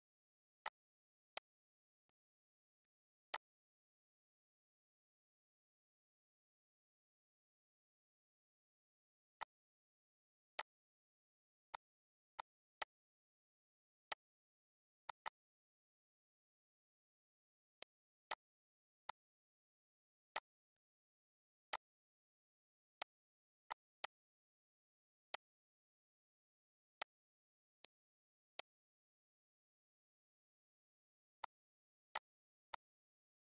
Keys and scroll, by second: 33.2 ctrl+s.